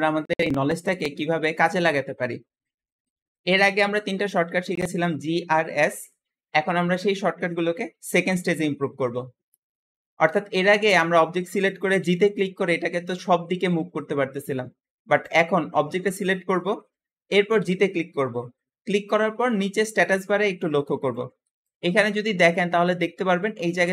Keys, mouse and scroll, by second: 11.9 g, 17.5 g.